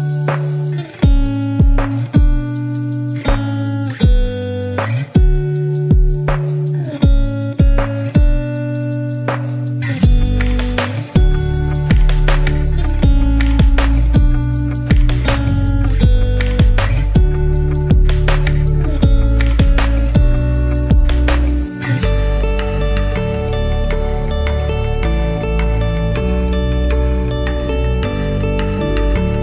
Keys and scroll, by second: 0.5 super+-, 0.6 super+-, 3.3 super+-, 5.9 space, 6.7 space, 8.7-9.9 typing, 16.3-18.0 typing, 20.9-23.0 typing, 25.8-27.2 typing.